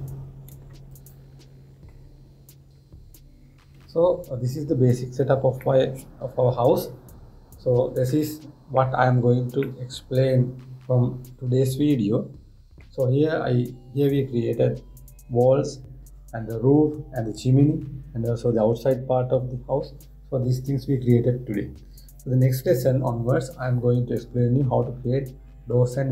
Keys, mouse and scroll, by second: 0.1 scroll down 1, 0.3-1.6 middle drag, 1.6 click, 2.6-4.9 middle drag, 4.9 scroll up 1, 5.1-5.4 scroll down 1, 5.4-5.7 scroll up 1, 5.7-6.1 scroll down 1, 6.1 scroll up 1, 6.3-9.4 middle drag, 10.3-13.4 middle drag.